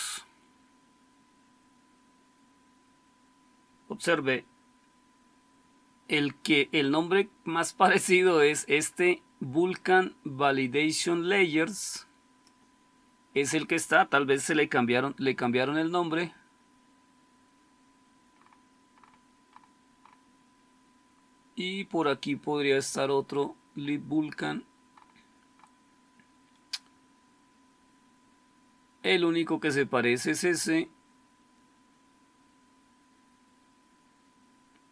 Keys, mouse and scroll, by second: 25.6-26.4 scroll up 1, 26.4-32.5 scroll up 1, 32.5-34.9 scroll up 1.